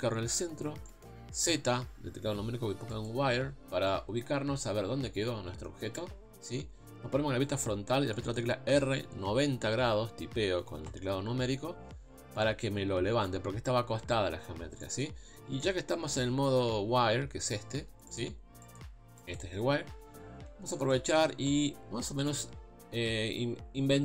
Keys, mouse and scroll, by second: 0.9 shift+middle click, 1.5 z, 3.7 scroll up 2, 3.9-6.5 middle drag, 6.5 KP_1, 8.1 shift+middle click, 8.7 r, 11.6-12.1 scroll down 1, 12.1 KP_3, 14.8-18.1 shift+middle drag, 18.1 click, 18.6 click, 19.2 click, 19.9 scroll up 1, 20.2 scroll down 2, 20.7 shift+middle click, 21.6 g.